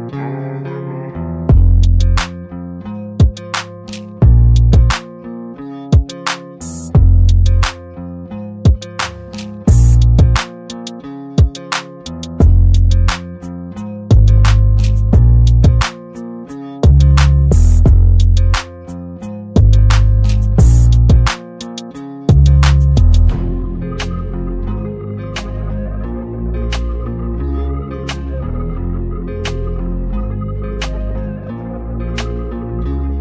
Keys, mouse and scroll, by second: 0.0 click, 2.8 BackSpace, 3.5 Tab, 5.7 click, 7.4 Tab, 9.3 click, 11.4 Tab, 13.3 click, 14.8 Tab, 16.7 click, 18.4 Tab, 21.2 click, 25.2 Tab, 26.7 Tab, 28.1 click, 29.8 Delete, 30.5-31.4 drag.